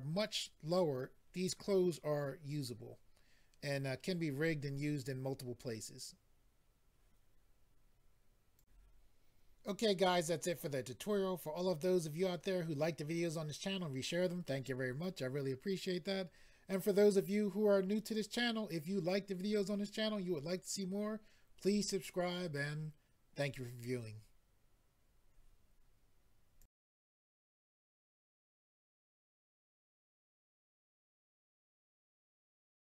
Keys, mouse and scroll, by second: 8.5 click, 8.6 click, 26.6 click.